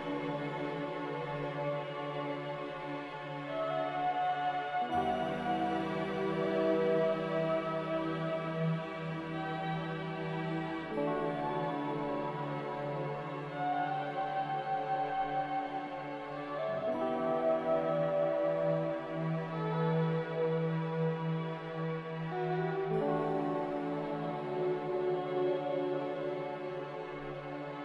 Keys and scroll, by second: 0.1 ctrl+v, 3.0 n, 7.6 a, 12.6 n, 19.3 z, 22.1-23.1 typing, 24.8 2.